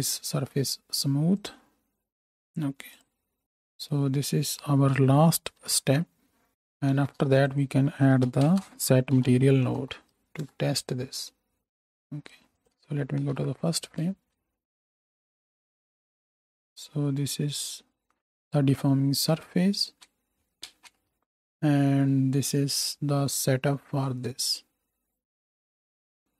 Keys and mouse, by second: 5.6 ctrl+j, 6.9 shift+a, 12.6 click, 13.2 shift+Right, 13.2 shift+right click, 13.3 shift+Left, 13.6-16.3 drag, 14.0 space, 16.3-20.0 right drag, 20.0 space, 20.6 ctrl+space, 20.9-22.8 drag, 25.9-26.3 ctrl+right drag.